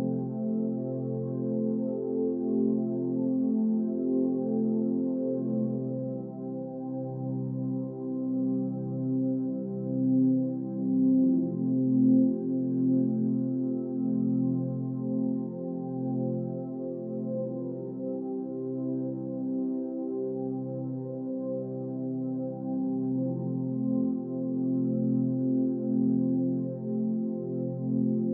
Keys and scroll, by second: 1.9 Down, 2.8 Left, 2.9 Down, 3.3 Right, 3.4 Down, 5.5 ctrl+=, 9.5 Delete, 10.3 Delete, 11.5 Delete, 13.0 Delete, 14.1 Delete, 20.0 Right, 20.5 Up, 20.7 Left, 21.1 Up, 21.3 Right, 21.7 Up, 21.8 Right, 22.1 Up, 24.4 Right, 24.5 Up, 24.5 Right, 24.6 Up, 24.7 Right, 24.8 Up, 24.9 Right, 26.0 Up, 27.1 Up, 27.1 Right, 27.3 Down, 27.6 Right, 28.1 Up.